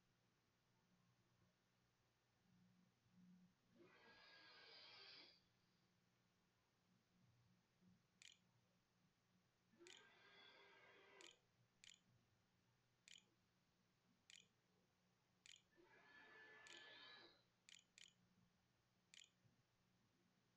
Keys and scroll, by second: 7.4 Left, 7.5 Up, 8.0 Return, 8.3-15.4 typing, 16.5 h, 17.5-20.5 typing.